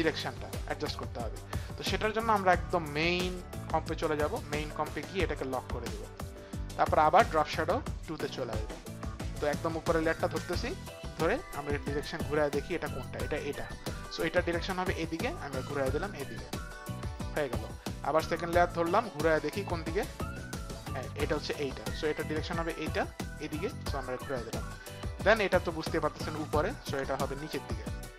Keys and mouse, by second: 6.1 click, 7.6 click, 9.6 click, 15.9 click, 18.0 click, 19.4 click, 25.3 click, 25.8 click.